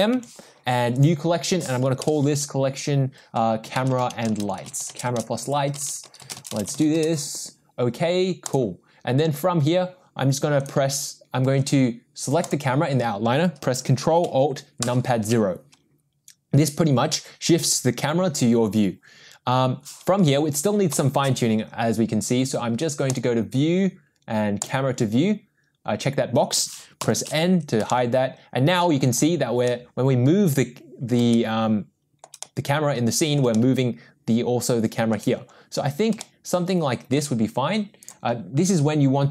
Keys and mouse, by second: 0.1 m, 5.9 BackSpace, 6.0 BackSpace, 12.5 click, 14.9 ctrl+alt+KP_0, 20.9 n, 23.1 click, 27.0 n, 27.9-29.0 shift+middle drag, 29.6-31.1 middle drag, 31.3 shift+middle click, 32.4-33.4 middle drag, 33.5-35.1 shift+middle drag, 36.2-37.1 shift+middle drag, 38.0 click.